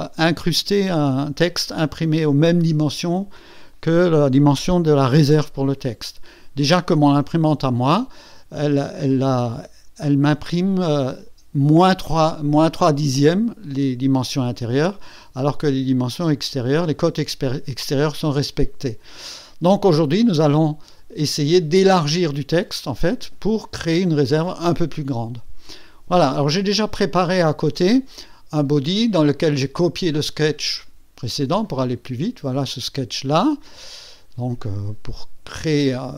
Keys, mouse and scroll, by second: 27.2 click, 31.4 click, 33.9 scroll up 2, 36.0 click.